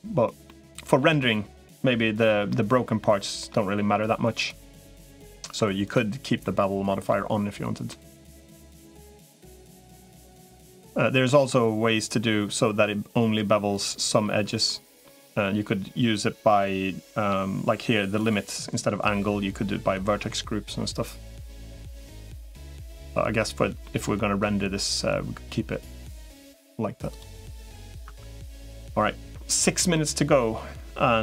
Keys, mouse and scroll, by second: 0.3 middle click, 2.3-3.4 middle drag, 4.8 middle click, 6.3 middle click, 7.7 middle click, 8.9-10.6 middle drag, 14.5 middle click, 18.2-21.0 drag, 22.3 middle click, 23.7 middle click, 23.8 click, 24.2 right click, 27.4 middle click, 28.0 Tab, 29.8 middle click.